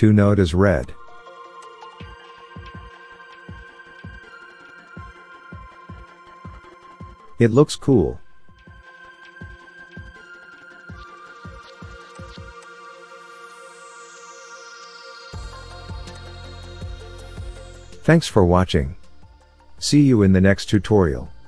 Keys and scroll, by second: 8.4 KP_1.